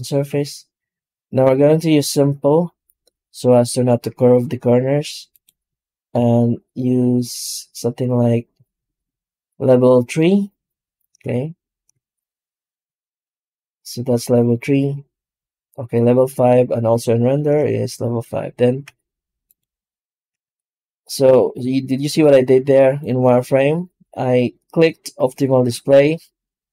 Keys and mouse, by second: 5.2 click, 11.8 shift+z, 13.1 click, 18.7 z, 20.3 z, 25.2 click.